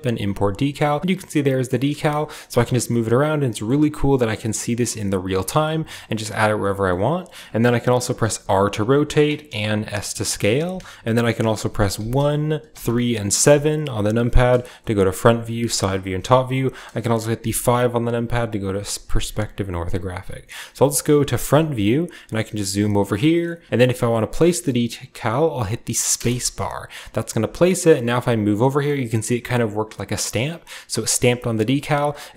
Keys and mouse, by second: 11.7 KP_1, 12.5 KP_3, 13.2 KP_7, 13.5-32.3 middle drag, 14.6 KP_1, 15.2 KP_3, 15.9 KP_7, 17.2 KP_5, 18.5 KP_5, 20.0 KP_1.